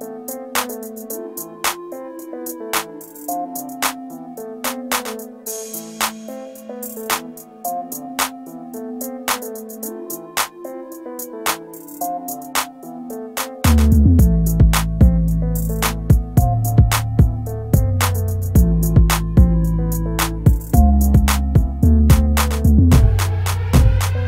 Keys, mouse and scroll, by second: 3.2 scroll up 1, 12.5 scroll down 1, 19.3 scroll up 1.